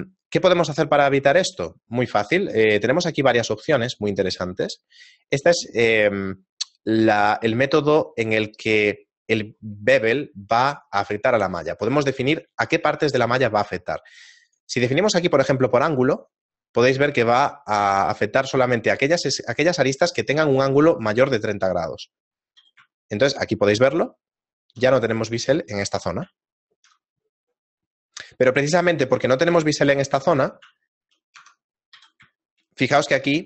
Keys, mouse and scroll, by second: 0.7 shift+middle click, 2.8 click, 14.5 click, 23.0 shift+middle click, 23.0 z, 26.4 shift+middle click, 27.5-28.5 scroll up 3, 30.0 right click, 30.3 Tab, 30.8 shift+middle click, 31.5 Tab, 32.9 shift+middle click, 32.9 z.